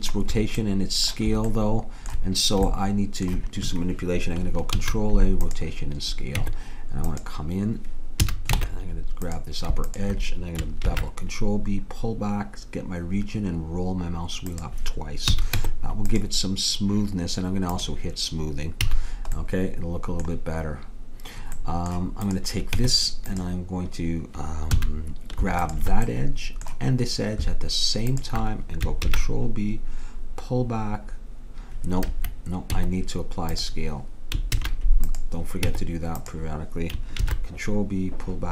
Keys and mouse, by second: 0.7 middle click, 1.1-4.8 middle drag, 4.8 ctrl+a, 6.5 Tab, 8.3 a, 8.6 ctrl+Tab, 9.9-11.5 drag, 10.9 ctrl+b, 15.3 a, 16.3 Tab, 18.9 a, 19.1 click, 21.8 middle click, 22.3-23.5 drag, 22.8 Tab, 24.8 a, 26.2-27.4 drag, 28.2 click, 29.1 ctrl+b, 32.8 Tab, 34.6 ctrl+a, 35.7 Tab, 37.3 ctrl+b.